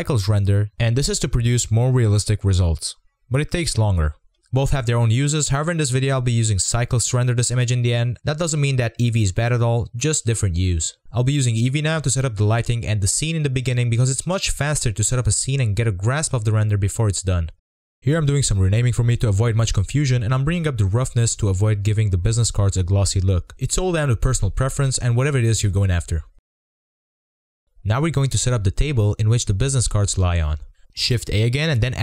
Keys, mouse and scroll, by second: 0.0-0.4 middle drag, 0.4 z, 2.0-4.8 middle drag, 4.8-9.6 drag, 9.6-13.6 middle drag, 13.6 click, 14.0-14.4 middle drag, 14.4 click, 14.5 scroll down 1, 14.6 middle click, 15.3 click, 16.2-22.2 drag, 23.2-27.0 drag, 27.0-28.0 middle drag, 29.1 click.